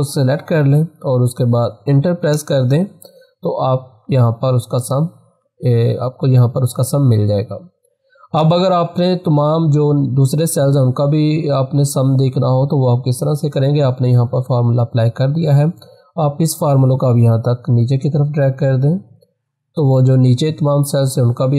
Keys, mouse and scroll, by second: 2.3 Return, 5.4 click, 16.4-21.2 drag.